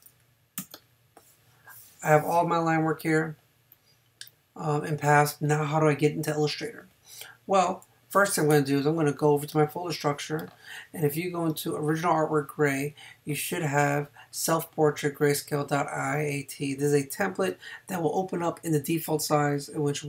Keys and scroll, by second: 0.6 a, 8.5 super+Tab.